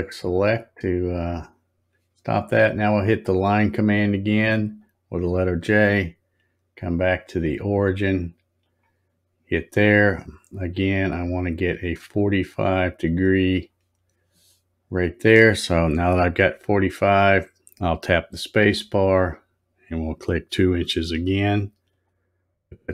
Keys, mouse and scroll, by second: 0.4 click, 4.7 click, 8.6 click, 18.6 space.